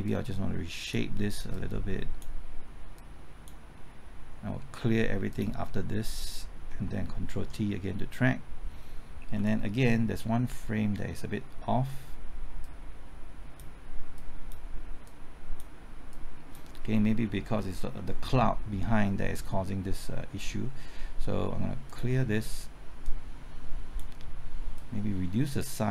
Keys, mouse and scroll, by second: 6.8 typing, 7.3 ctrl+t, 8.8 ctrl+t, 9.3 Left, 12.6-16.1 drag, 17.2 Left, 17.9 typing, 21.8-25.9 drag.